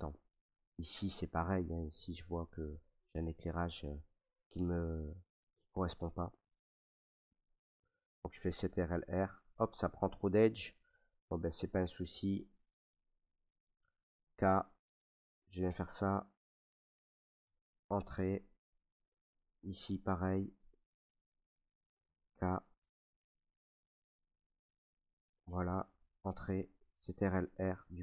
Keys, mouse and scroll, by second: 0.2 middle click, 3.4 middle click, 4.4 shift+middle click, 5.3 right click, 5.7 Tab, 7.5 middle click, 8.5 ctrl+r, 10.6 right click, 11.2 middle click, 11.3 middle click, 12.3 shift+middle click, 12.5 shift+middle click, 14.2 k, 15.1 click, 16.7 click, 17.4 Return, 17.7 middle click, 17.7 middle click, 17.8 shift+middle click, 17.8 middle click, 17.8 shift+middle click, 19.0 middle click, 19.2 middle click, 19.3 middle click, 19.8 middle click, 19.8 scroll, 20.7 scroll, 22.9 middle click, 23.2 click, 23.2 k, 25.3 click, 26.1 Return, 27.3 ctrl+r.